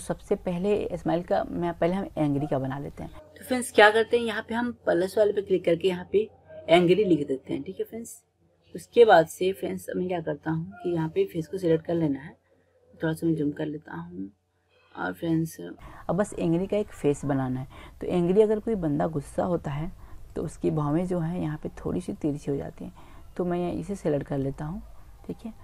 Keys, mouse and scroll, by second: 3.1-6.0 drag, 12.3-16.4 middle drag, 19.6 Tab, 20.3 click, 22.8 middle click, 23.0-24.0 drag, 24.4-25.0 middle drag, 25.0 click, 25.0 middle click, 25.2 click, 25.5 middle click.